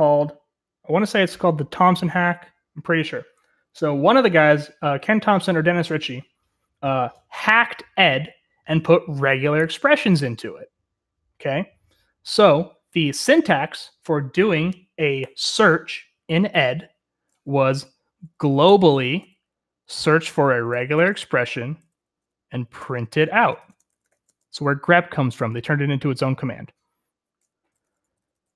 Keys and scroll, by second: 18.6-19.1 typing, 20.4-24.7 typing, 27.6 Escape, 27.8-28.5 typing.